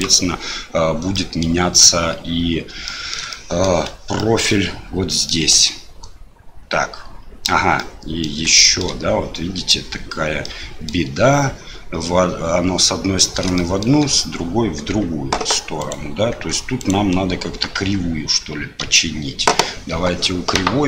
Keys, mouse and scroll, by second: 1.2 middle click, 2.9 middle click, 3.3 shift+middle click, 4.2 shift+middle click, 5.1 middle click, 5.5 Tab, 7.7 middle click, 8.5 shift+click, 10.4 middle click, 13.5 shift+middle click, 15.8 click, 16.3 Tab, 16.8 click, 17.7 Tab, 18.8 a.